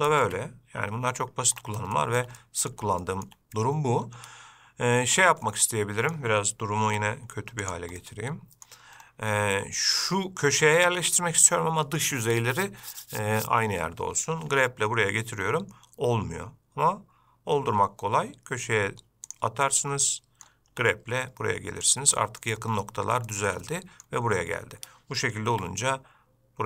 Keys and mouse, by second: 2.2 shift+middle click, 2.6 middle click, 3.2 shift+middle click, 5.7-6.3 middle drag, 7.1 g, 8.2-8.9 middle drag, 14.7 g, 20.2-20.7 middle drag, 20.9 g, 22.4 middle click, 23.5 shift+middle drag, 23.9-24.2 middle drag, 25.7 g.